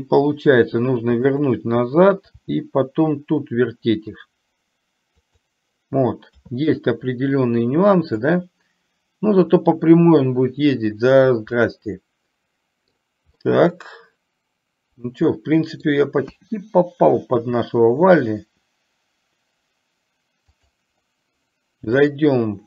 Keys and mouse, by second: 2.6 r, 8.5-11.3 drag, 11.7-13.1 middle drag, 13.5-16.0 middle drag, 20.7 click, 22.1-22.6 drag.